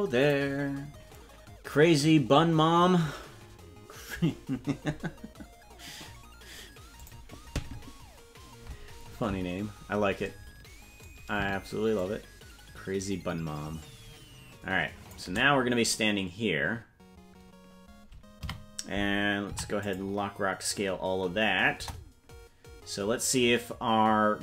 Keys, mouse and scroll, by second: 0.0-1.1 scroll down 3, 11.9-15.1 shift+drag, 18.4 a, 19.4 i, 21.7 KP_0.